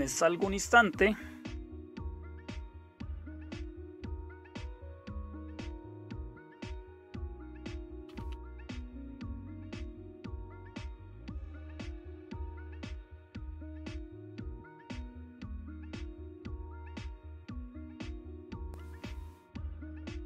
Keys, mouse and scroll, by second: 3.2 alt+super+q, 7.3-13.8 typing, 14.1 Return.